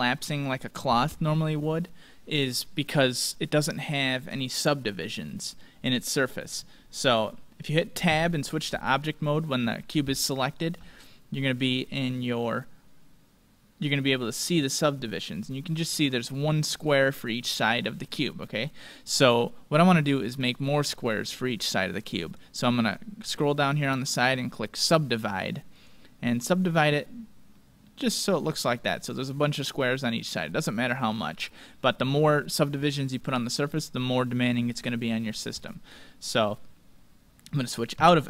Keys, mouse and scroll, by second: 4.3-6.1 middle drag, 6.1-7.9 middle drag, 8.0 Tab, 10.4-12.8 middle drag, 18.4-20.2 middle drag, 20.3-22.3 drag, 23.6-28.3 drag, 27.8-29.8 middle drag, 30.0-31.6 middle drag, 36.8-37.4 scroll down 1, 37.4-38.2 middle drag, 38.0 Tab.